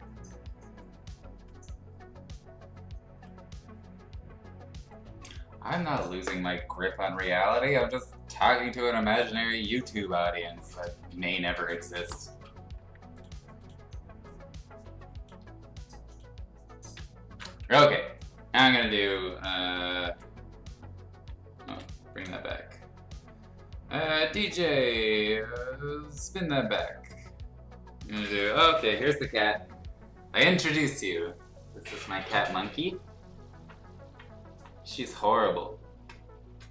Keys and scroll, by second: 16.8 ctrl+a, 20.0 ctrl+i, 21.6 ctrl+i.